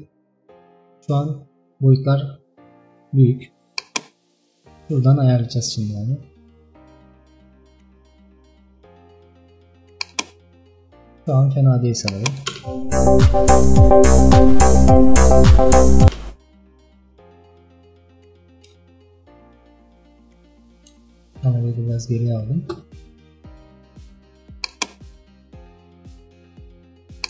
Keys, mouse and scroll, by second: 0.8 scroll up 2, 1.4 scroll down 2, 4.0-6.9 drag, 12.1 click, 12.6 space, 16.1 space, 17.5 shift+middle click, 18.5 KP_0, 19.2 KP_0, 19.9-20.5 scroll down 2, 21.2 shift+middle click, 21.7 scroll down 1, 21.9-23.2 scroll up 1.